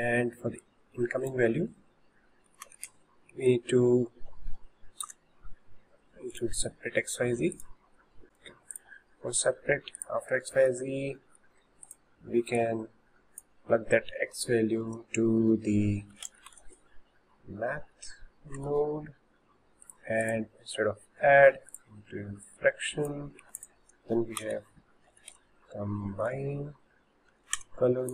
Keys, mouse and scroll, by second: 0.7 click, 8.2 click, 8.7 click, 10.0 click, 10.6-11.9 shift+middle drag, 11.9 drag, 12.6 click, 20.3-27.6 drag.